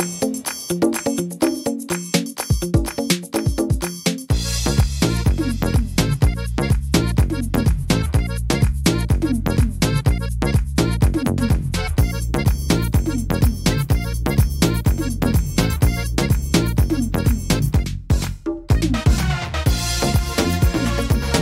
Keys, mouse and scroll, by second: 0.3 middle click, 2.4 e, 4.7 click, 6.3 ctrl+z, 7.1 click, 8.9 click, 10.6 e, 13.1 click, 15.5 e, 17.6 middle click, 18.0 scroll down 1, 19.1 middle click, 20.1 click, 21.2 e.